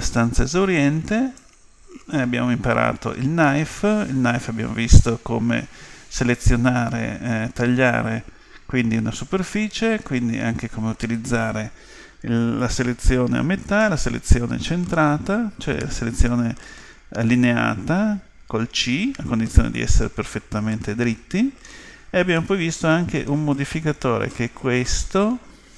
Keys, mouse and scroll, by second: 0.8-2.7 drag, 19.8-21.7 middle drag, 22.4-24.3 middle drag.